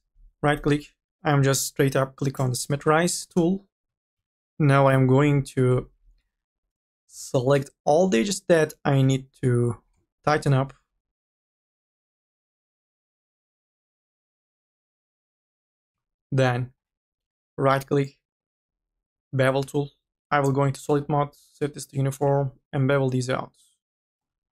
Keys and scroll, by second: 3.9-4.9 typing, 7.0 u, 7.4 l, 14.9 ctrl+z.